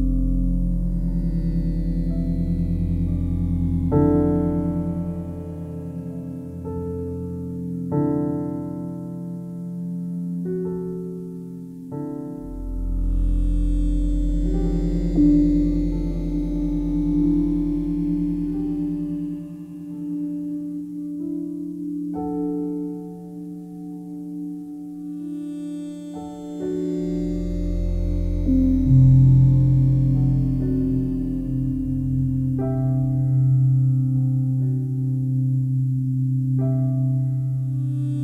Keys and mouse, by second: 2.5 click, 3.1-4.5 alt+drag, 6.0 click, 6.6 shift+click, 7.0 shift+click, 7.3 shift+click, 7.6 shift+click, 7.6 typing, 8.8-9.1 typing, 11.3-13.5 typing, 14.7-17.1 typing, 20.9 click, 21.4 r, 21.7 y, 23.5 shift+click, 23.9-25.1 alt+drag, 25.4 ctrl+alt+click, 25.9-28.2 ctrl+alt+drag, 28.8-29.8 alt+drag, 30.8 typing, 30.8-32.8 drag, 32.8 typing, 34.5-36.4 drag, 37.0 click.